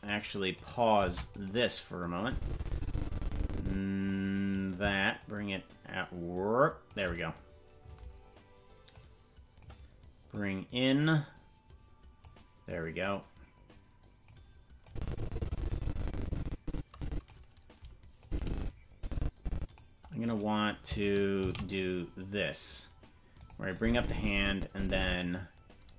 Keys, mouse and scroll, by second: 0.1 right click, 0.6 right click, 1.0 ctrl+Tab, 1.4 right click, 2.2-4.1 drag, 5.1-6.9 shift+drag, 8.9 click, 10.3-12.3 drag, 13.0-14.3 drag, 14.8-17.3 drag, 18.2-19.8 drag, 20.2-21.4 right drag, 21.4 shift+d, 23.7-25.2 drag.